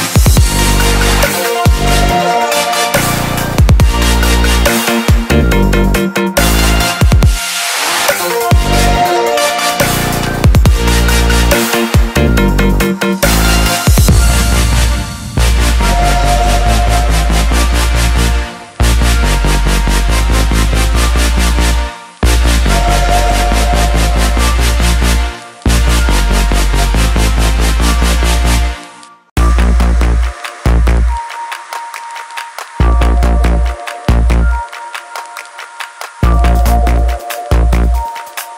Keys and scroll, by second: 21.6-23.9 typing.